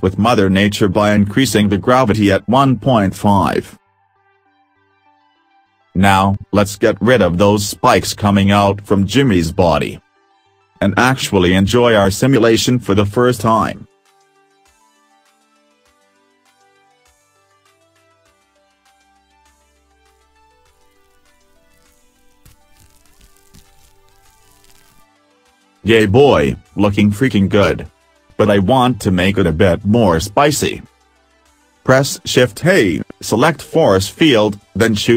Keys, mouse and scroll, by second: 10.5 click, 13.9 click, 15.3 middle click, 17.1 middle click, 18.7 middle click, 30.3 click, 31.9 shift+a.